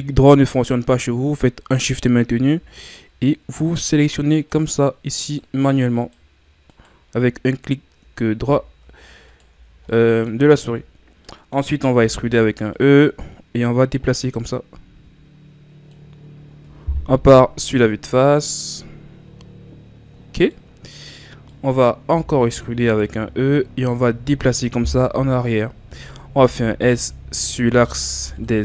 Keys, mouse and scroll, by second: 2.9-8.5 shift+right drag, 8.5 ctrl+z, 9.3 shift+right click, 9.6 scroll down 5, 9.9 middle click, 10.5 scroll down 5, 10.8-11.2 scroll up 4, 11.2 middle click, 12.1 e, 13.6-16.7 drag, 17.2 KP_1, 18.0-19.2 scroll down 6, 19.2-20.2 scroll up 8, 20.2-20.5 ctrl+scroll down 3, 20.5-22.2 middle drag, 22.2 e, 23.5-25.0 drag, 25.0 KP_1, 26.3 s.